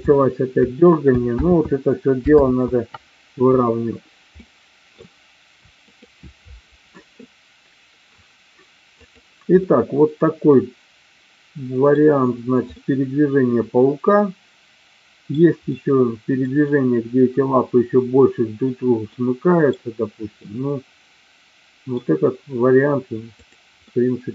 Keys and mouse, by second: 1.1 space, 1.4 ctrl+z, 2.5 ctrl+z, 4.4 middle click, 5.9 click, 9.1 click, 9.6-12.0 middle drag, 12.6-15.4 middle drag, 15.6 middle click, 19.1 middle click, 20.5-22.0 middle drag, 23.3 click, 23.8 middle click.